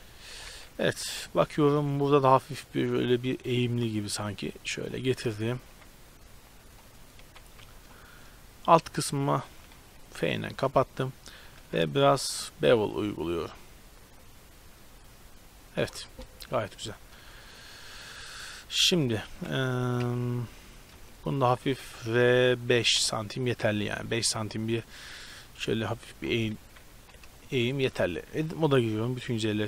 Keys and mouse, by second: 0.5 z, 0.9 KP_7, 1.3 shift+space, 3.7 g, 5.6 g, 7.3 z, 7.7 Tab, 9.8 f, 11.7 ctrl+b, 16.0 Tab, 19.1 KP_7, 19.4 z, 20.0 KP_3, 21.6 r, 24.2 z, 25.2 middle click, 25.9-26.6 middle drag, 26.6 KP_7, 27.0 z, 28.1 Tab, 28.4 a, 28.6 a.